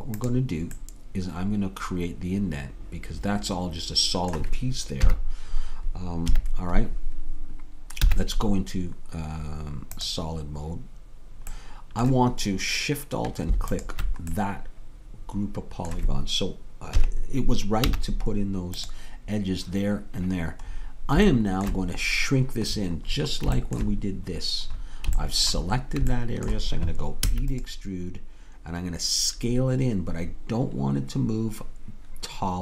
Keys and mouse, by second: 5.1 KP_1, 6.3 KP_3, 8.0 z, 11.6-16.3 middle drag, 17.0 KP_3, 17.8 z, 21.3-22.9 middle drag, 24.8-25.8 middle drag, 27.3 e.